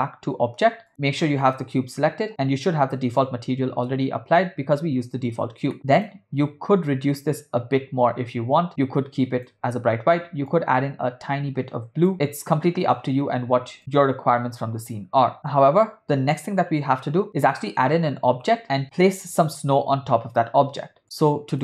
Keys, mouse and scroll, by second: 0.9 middle click, 1.4 click, 5.8 middle click, 6.0 click, 12.8 click.